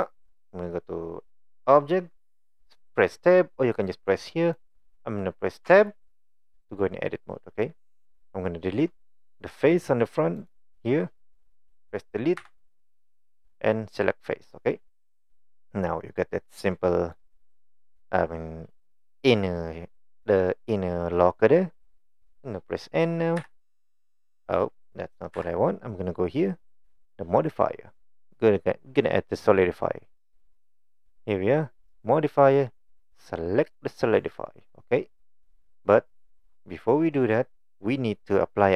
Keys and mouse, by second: 4.1 click, 5.7 Tab, 10.4 click, 12.4 Delete, 15.3-17.2 middle drag, 23.4 n, 25.4 n, 30.4 click, 31.9-34.4 drag, 36.3 middle click, 37.3 middle click.